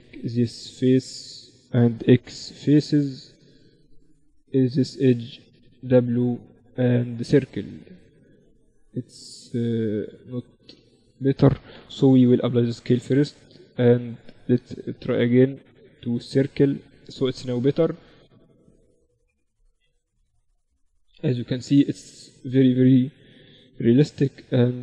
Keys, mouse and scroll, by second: 1.5-2.7 middle drag, 1.6 x, 3.6-5.8 right drag, 4.2-6.6 drag, 4.8 w, 9.2 ctrl+z, 9.8 Tab, 10.2 Tab, 11.2 Tab, 11.8 ctrl+a, 13.2 Tab, 14.2 w, 19.4 KP_1, 22.8 e.